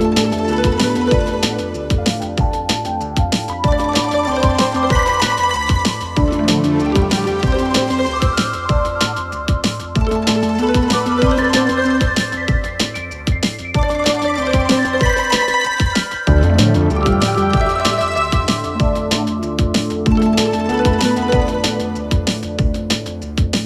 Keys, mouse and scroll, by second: 0.0 ctrl+d, 0.9-1.5 click, 1.9-3.5 click, 13.0 click, 13.6 Return, 14.3-15.9 typing, 16.2 ctrl+a, 17.2 click, 17.4 Return, 18.2 Return, 18.5 click, 18.6 Return, 19.4 Return, 19.6 click, 20.2 ctrl+v, 20.6 Return, 22.4 space.